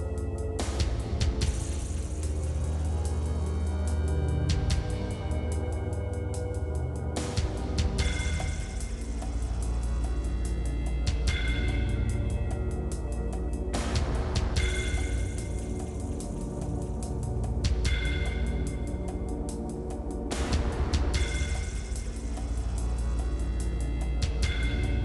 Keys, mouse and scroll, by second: 0.2 click, 1.5 shift+click, 1.8 middle click, 2.1 shift+click, 2.2 middle click, 2.9 ctrl+KP_Add, 3.2-4.3 drag, 4.3 ctrl+z, 4.6 click, 5.8 click, 7.3 click, 7.8 click, 8.5 click, 9.4 click, 11.2 middle click, 11.6 click, 12.0 middle click, 12.6 click, 13.4 click, 15.2 middle click, 15.7-16.3 scroll up 5, 16.3 middle click, 16.9 click, 17.6-18.7 drag, 19.3 shift+click, 19.4 middle click, 19.7 shift+click, 20.4 middle click, 21.2 scroll up 3, 21.4 shift+middle click, 21.8 scroll up 2, 22.0 shift+click, 22.3 middle click, 22.7 middle click, 23.1 shift+click, 23.1 middle click, 23.4 scroll down 1, 23.7 shift+click, 23.9-24.4 scroll down 4, 24.4-25.0 drag.